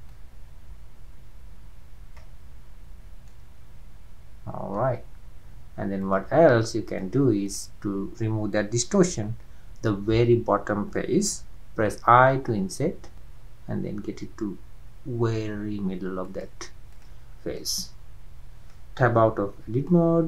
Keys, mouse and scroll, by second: 0.5-3.2 drag, 3.3-6.0 middle drag, 6.0-7.0 drag, 7.4 click, 12.2 i, 13.1 i, 16.9 click, 17.3 scroll down 2, 17.6-19.2 middle drag, 19.2 Tab, 19.6 scroll up 1, 19.8-20.2 middle drag.